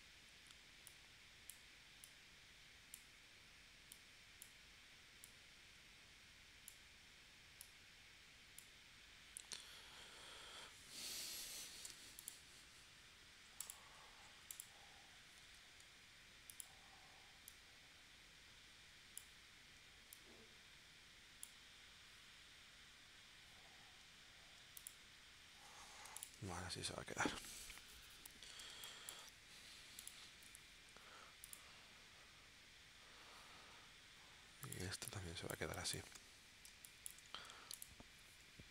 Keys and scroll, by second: 11.9 v, 15.4 shift+w, 26.1 v, 28.7 space, 34.9 space, 36.7 space.